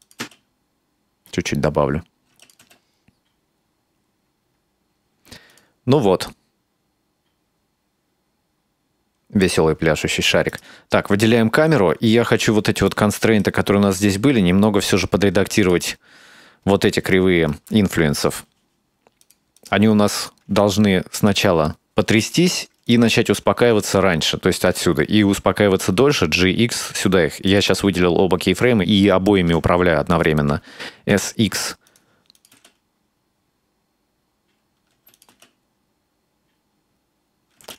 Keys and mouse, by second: 0.0 click, 0.2 space, 2.4 space, 2.4 click, 2.6 space, 5.5 click, 10.5 right click, 12.7 space, 12.9-13.5 right drag, 15.6 click, 16.9 shift+middle click, 18.4 click, 18.8 click, 19.5 right drag, 19.8 g, 20.9-22.6 drag, 22.9-23.3 right drag, 23.5 s, 25.9 g, 29.4 g, 31.0 s, 32.4 click, 32.6 space, 35.0 space, 35.2 click, 35.3 space, 37.6 space.